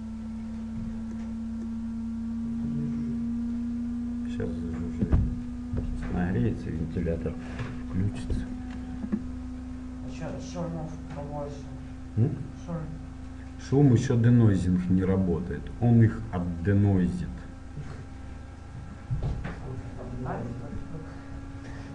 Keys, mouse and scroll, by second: 4.7-6.4 scroll up 1, 6.4 scroll up 1, 18.7 middle click, 18.8 scroll up 1, 18.9-20.7 middle drag.